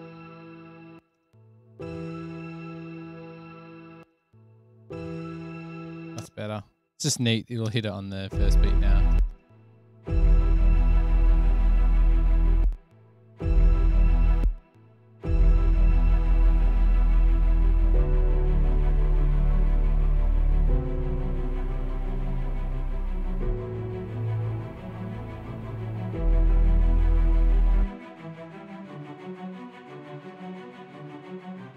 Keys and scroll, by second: 0.8-1.4 typing, 3.8-4.3 typing, 6.4 space, 9.5 space, 12.0 /, 12.7 space, 12.9 space, 15.6 super+[, 15.7 super+[, 16.2 super+[, 26.4 super+=.